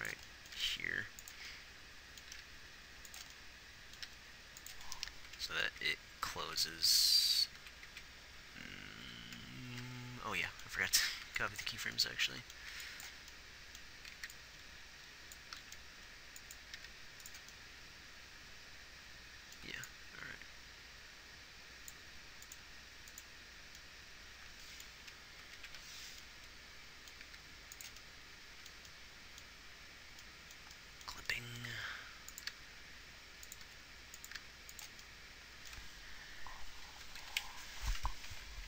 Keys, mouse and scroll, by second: 0.1 r, 1.0 r, 2.7 g, 4.4 g, 6.3 Right, 6.7 Right, 7.3 Right, 7.6 Right, 8.0 Right, 8.3 Right, 9.4 Left, 11.5 a, 11.5 b, 13.0 b, 15.9 Right, 15.9 Left, 15.9 b, 15.9 shift+d, 17.1 g, 26.0 Right, 27.6 g, 32.3 r, 32.9 g, 34.0 r, 34.7 g, 37.5 Left, 37.8 Left, 38.3 Right, 38.6 Right.